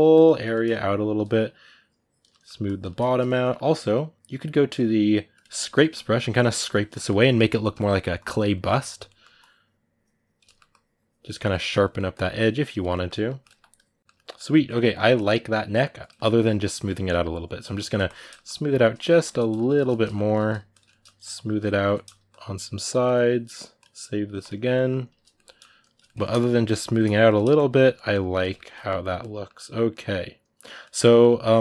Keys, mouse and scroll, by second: 0.3 middle click, 0.6-2.1 shift+drag, 2.1 middle click, 2.4 shift+click, 2.7 middle click, 2.9 shift+click, 3.2-5.2 middle drag, 5.2 click, 5.4-6.5 ctrl+middle drag, 6.5 click, 6.7 ctrl+middle click, 7.1 click, 7.4 ctrl+middle click, 7.9 click, 8.8 middle click, 9.2-10.2 drag, 10.2 ctrl+middle click, 10.5 click, 11.1 middle click, 11.6-12.7 drag, 12.7 middle click, 13.5 click, 14.0-16.6 ctrl+middle drag, 16.6-18.0 shift+drag, 18.0 middle click, 18.2 shift+click, 18.7 middle click, 19.0 shift+click, 19.2 middle click, 19.4 shift+click, 19.7-21.0 shift+middle drag, 21.0 shift+click, 21.7 middle click, 22.1-24.8 shift+drag, 24.8 middle click, 25.6 shift+click, 25.8-26.9 ctrl+middle drag, 26.9 shift+click, 27.1 middle click, 27.3 shift+click, 27.7-31.6 middle drag.